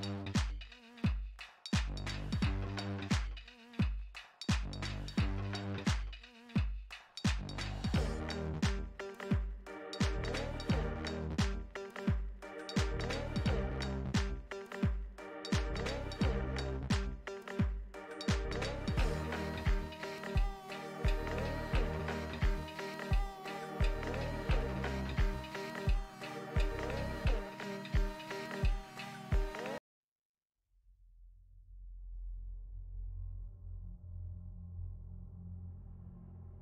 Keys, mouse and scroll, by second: 2.4-4.6 middle drag, 6.2-19.5 middle drag, 19.5 space, 19.7 middle click, 20.4 f, 21.1 click, 22.0 middle click, 22.5-24.0 drag, 24.0 middle click, 24.5 click, 25.0 middle click, 25.5 f, 26.2-27.5 middle drag, 27.5-29.0 drag, 29.0 f, 29.6-31.5 drag, 31.5 middle click, 32.0-33.5 drag, 33.5 middle click, 34.1-36.6 drag.